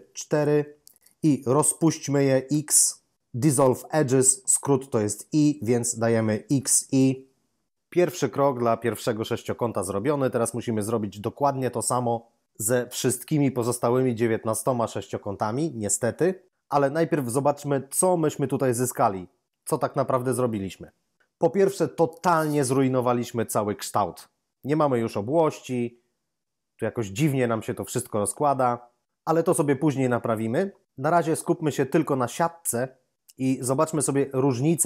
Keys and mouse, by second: 0.2 shift+double right click, 2.4 x, 6.4 x, 6.9 i, 33.4 8, 34.2 8.